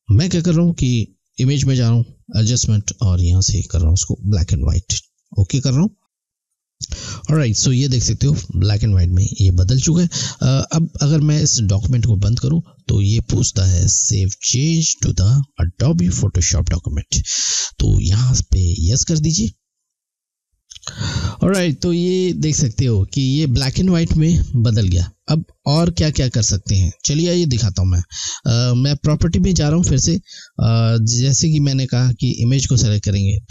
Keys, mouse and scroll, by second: 1.2 click, 11.7 click, 19.7 click, 24.9 click, 28.8 click, 32.4 click.